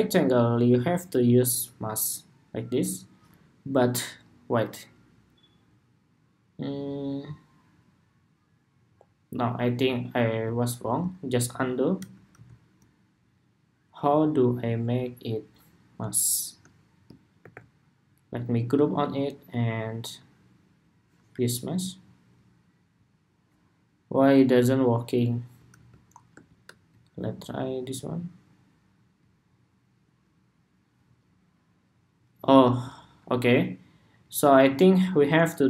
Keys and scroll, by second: 10.5 super+z, 11.2 super+z, 11.7 super+z, 12.0 super+z, 17.1 super+g, 25.4 super+z, 32.4 super+z.